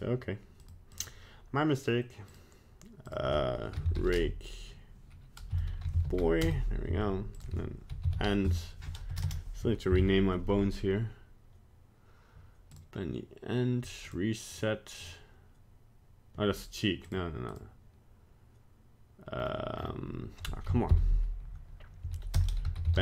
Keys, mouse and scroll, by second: 0.6 click, 0.9 click, 3.1 click, 7.3 click, 9.2 BackSpace, 14.1 click, 14.5 click, 15.0 click.